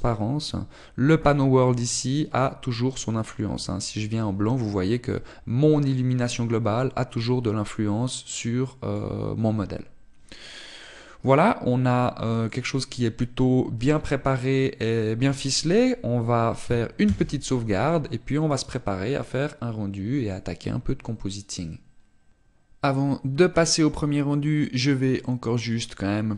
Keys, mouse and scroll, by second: 3.5 click, 12.4 click, 18.1 ctrl+s.